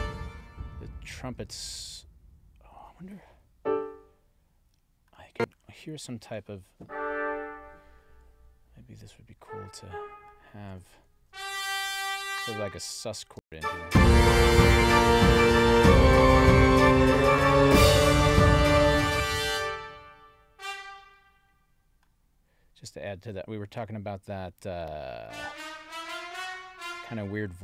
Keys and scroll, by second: 11.2 alt+Down, 13.3 space, 19.0 space.